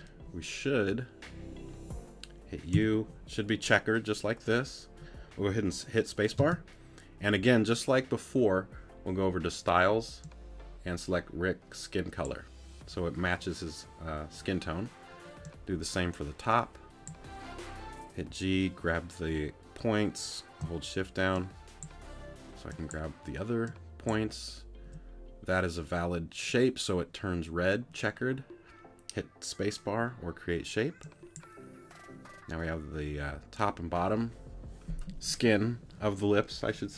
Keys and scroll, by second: 2.7 u, 6.4 space.